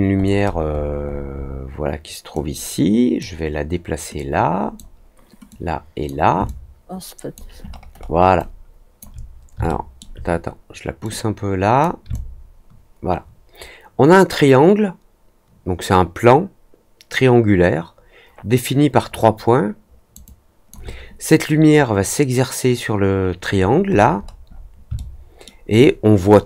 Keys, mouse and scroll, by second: 1.0 scroll up 2, 1.3 scroll down 2, 2.3-3.1 drag, 4.1 click, 5.4-6.0 drag, 6.4 alt+click, 7.6-8.1 alt+scroll up 2, 8.3-8.9 alt+drag, 9.6-9.9 alt+middle drag, 11.0-11.7 drag, 12.0-20.1 alt+drag, 20.2 alt+click, 23.4-24.6 scroll up 4, 24.9 alt+middle click, 25.6 alt+click.